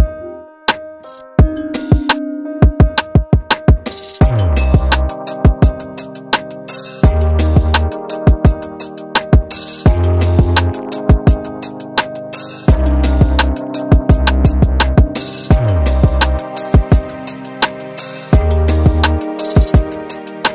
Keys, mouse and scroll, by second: 0.9 middle click, 0.9 scroll up 1, 1.2 alt+click, 2.5 alt+click, 3.1 middle click, 3.3 scroll down 1, 4.2 click, 4.6 click, 5.5-5.9 typing, 6.1 Return, 6.7 alt+scroll down 2, 6.9 alt+click, 7.7-8.1 scroll up 3, 8.8 click, 9.7 click, 10.3 scroll down 2, 10.8 scroll up 2, 13.1-18.2 drag, 18.5-18.9 scroll down 2, 18.9-20.1 alt+drag.